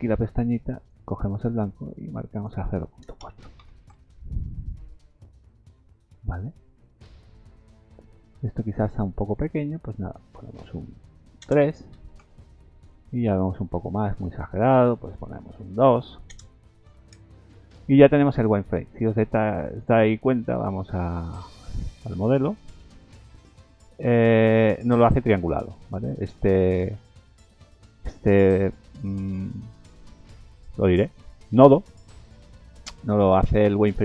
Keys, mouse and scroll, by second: 0.7 click, 2.3 click, 5.5 click, 5.9-6.6 scroll down 7, 7.5 scroll down 2, 8.5-9.1 scroll up 12, 10.1 click, 15.0 click, 18.3-19.5 scroll down 6, 19.2 shift+middle click, 19.9 middle click, 20.7 scroll down 2, 21.1 shift+middle click, 21.5 middle click, 21.9 scroll down 3, 22.7 KP_Decimal, 23.6 scroll up 3, 24.0 middle click, 24.5 shift+middle click, 25.1 middle click, 25.5-25.9 scroll down 2, 26.1 shift+middle click, 26.6 middle click, 27.4 scroll up 1, 27.8 middle click, 31.5 scroll down 2, 32.2 middle click, 33.5 middle click.